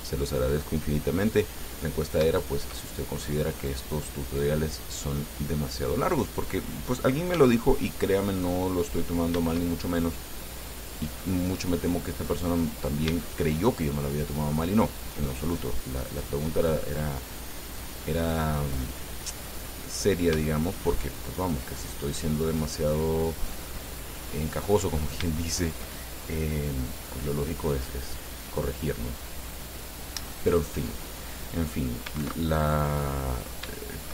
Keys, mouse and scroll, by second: 1.5 middle click, 2.6-3.7 shift+middle drag, 4.5-6.7 drag, 7.6 s, 9.0 click, 10.4 click, 11.4-12.8 middle drag, 12.9 middle click, 13.5 shift+middle click, 14.3 shift+click, 16.2-18.2 drag, 18.2-20.1 drag, 20.1 middle click, 20.7 shift+click, 21.9-24.3 drag, 24.4-25.5 middle drag, 25.6 shift+click, 27.1-28.2 drag, 32.5 ctrl+2, 33.1 click, 34.0-34.1 shift+drag.